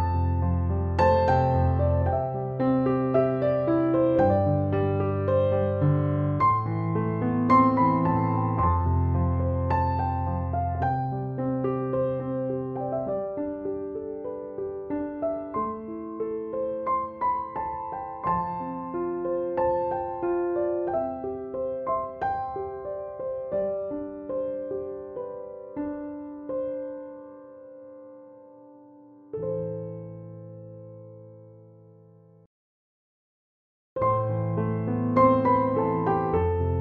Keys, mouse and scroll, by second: 0.3 space, 1.6 click, 1.9 s, 3.2-4.2 ], 4.9 alt+click, 5.3-6.5 drag, 7.5-8.1 click, 8.4 click, 9.2 space, 9.4-10.0 click, 9.7 space, 12.1 ctrl+-, 13.8 ctrl+=, 15.1 ctrl+=, 15.9 click, 18.6 b, 19.4 alt+click, 20.2 [, 20.5-21.8 drag, 22.0 ctrl+z, 22.8 [, 23.1 [, 23.3 [, 23.6 [, 24.3-28.6 drag, 31.7 ], 32.2 ], 32.8 ], 33.5 click.